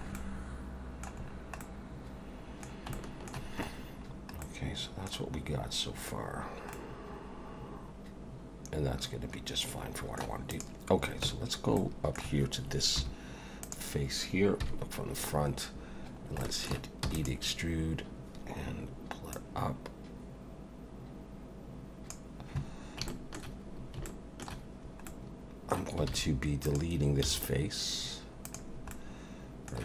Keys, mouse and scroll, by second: 0.1 middle click, 1.3-1.6 scroll down 2, 1.6 middle click, 2.9 shift+middle click, 3.6 scroll up 3, 4.0-4.3 scroll down 3, 4.4 middle click, 5.9 scroll down 2, 6.7 middle click, 10.5 click, 11.2 Tab, 11.8 middle click, 13.0 3, 13.6 click, 14.6 KP_1, 15.5-16.0 scroll up 2, 16.2 scroll down 1, 16.4 shift+middle click, 17.0 e, 19.3 click, 23.1 shift+middle click, 25.1 middle click, 26.1 alt+a, 26.6 click, 27.2 x, 28.9 middle click.